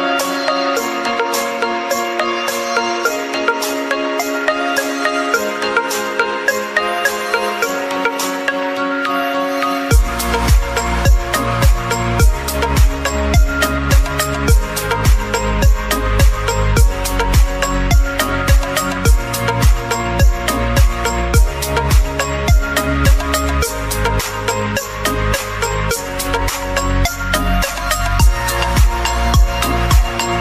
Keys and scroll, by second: 10.7 [, 11.0 [, 11.2-13.9 [, 17.1 [, 17.8 [.